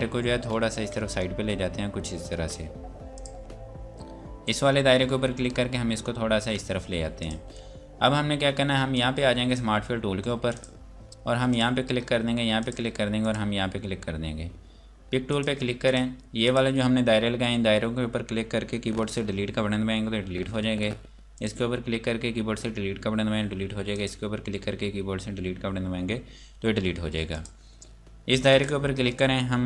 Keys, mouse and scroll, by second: 0.0 scroll up 1, 0.9 Right, 3.2 click, 5.4 Left, 7.2 click, 20.6 Delete, 21.3 click, 23.5 Delete, 23.9 click, 26.6 Delete, 27.3 click.